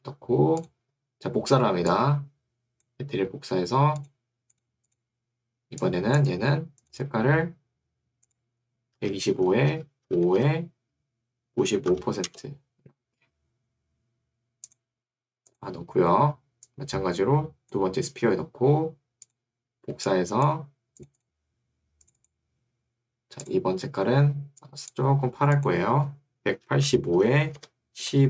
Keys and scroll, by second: 9.1 2, 9.5 5, 9.7 Tab, 10.1 5, 10.5 Tab, 11.7 9, 12.3 Return, 26.3-28.2 typing.